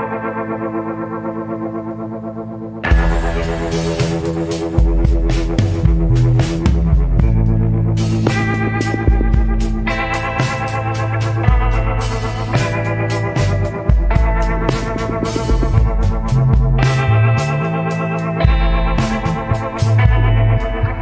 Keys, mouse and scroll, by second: 9.1 scroll down 1.